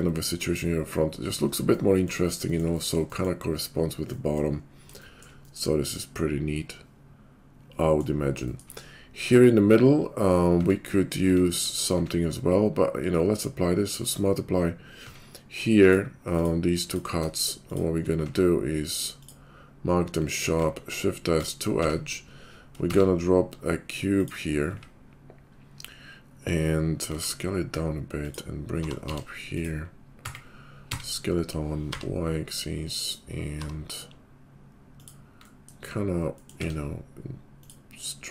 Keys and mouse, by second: 2.8-9.3 shift+middle drag, 9.3-17.7 drag, 10.5 Tab, 11.2 Tab, 11.9 q, 15.0 Tab, 17.7 shift+middle click, 17.8-21.8 shift+drag, 18.2 q, 20.5 shift+s, 21.8 Tab, 22.9 shift+a, 24.7 `, 25.8-38.3 drag, 27.1 s, 28.7 g, 30.2 s, 33.6 g, 36.6 Tab.